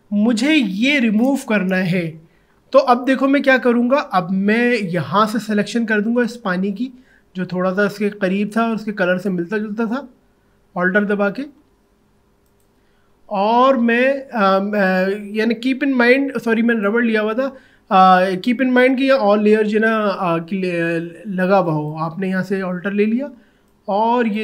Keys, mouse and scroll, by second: 5.1-7.3 alt+drag, 9.2 alt+click, 12.3 alt+click, 12.5 alt+click, 16.8 click, 21.7-24.4 drag.